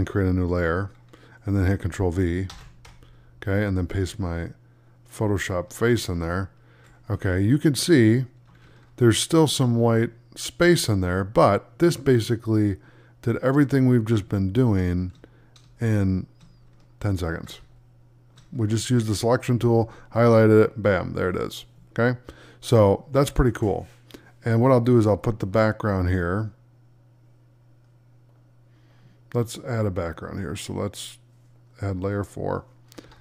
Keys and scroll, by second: 2.4 ctrl+v, 6.1 alt+z, 7.0 space, 9.8 space, 17.5 space.